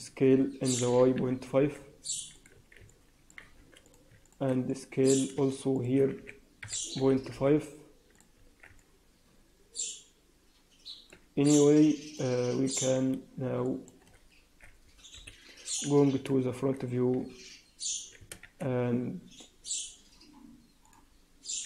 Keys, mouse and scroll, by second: 0.2 s, 2.5 Tab, 2.8 middle click, 3.3 Tab, 4.0 click, 4.1 shift+click, 4.6 middle click, 5.4 shift+click, 5.7 shift+click, 6.1 s, 8.3 Tab, 8.7 middle click, 11.2 Tab, 11.7 shift+middle click, 12.6 click, 12.9-13.5 scroll down 4, 13.5 shift+middle click, 15.1 KP_1, 15.8-16.2 scroll up 3, 16.4 shift+z, 18.3 shift+z, 20.8 click.